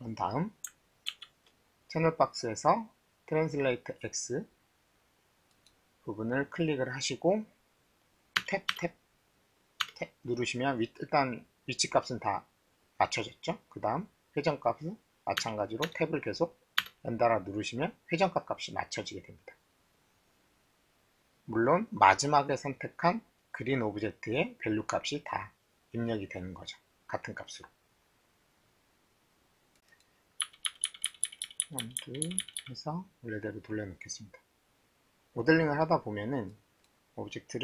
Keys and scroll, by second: 1.1 ctrl+a, 8.4 Tab, 8.7 Tab, 9.9 Tab, 15.4 Tab, 15.8 Tab, 30.4-32.5 typing.